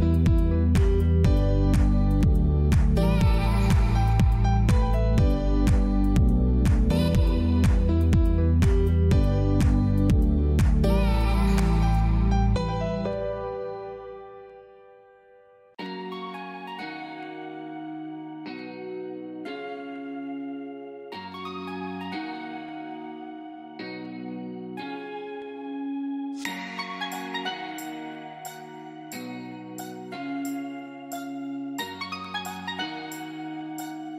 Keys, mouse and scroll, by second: 4.2 click, 5.8 space, 5.9 click, 6.3 space, 6.6 click, 6.7 space, 6.9 click, 7.2 space, 7.7 ctrl+d, 8.2 ctrl+e, 9.4 click, 12.8 click, 19.3 space, 19.4 click, 19.8 space, 20.0 click, 20.8 space, 20.9 click, 23.2 ctrl+j, 24.1 alt+i, 24.2 alt+a, 24.5 w, 24.8 Return, 26.4 z, 26.7 click, 27.5-29.5 typing, 30.8 alt+click, 31.6-34.1 typing.